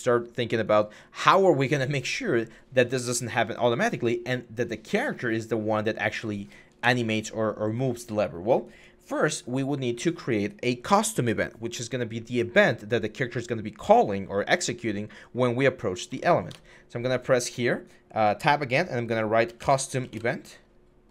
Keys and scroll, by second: 6.6 Delete, 16.0 Tab, 16.3 Tab, 19.4-19.9 typing, 21.0-21.1 typing.